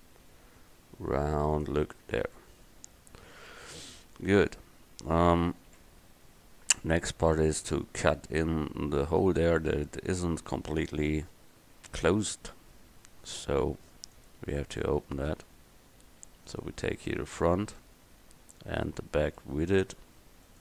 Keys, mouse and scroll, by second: 1.8 middle click, 6.5 KP_1, 12.6-14.2 middle drag, 14.6-17.9 drag, 17.9 middle click, 18.1 middle click, 18.2 middle click, 18.7 middle click.